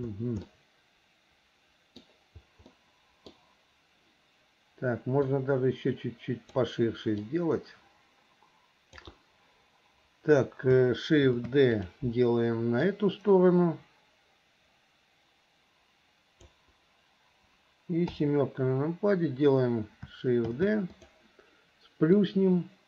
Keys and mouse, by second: 0.6-2.2 middle drag, 2.8 middle click, 5.6-6.7 drag, 7.4-9.2 drag, 11.4 shift+d, 12.9-16.7 drag, 18.2 KP_7, 20.6 shift+d, 22.4-22.8 drag.